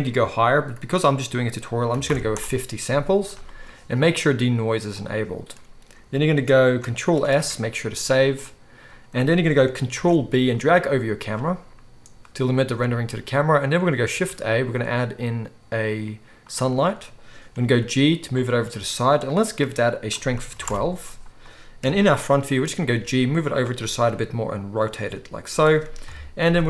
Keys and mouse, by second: 7.1 ctrl+s, 7.3 ctrl+s, 7.4 ctrl+s, 9.9 ctrl+b, 14.1 shift+a, 17.5 g, 18.4-19.2 middle drag, 19.2 click, 19.3 middle click, 20.0-23.6 drag, 21.8 KP_1, 22.9 g, 23.6-26.6 middle drag, 24.0 r, 25.0 g, 26.0 KP_7.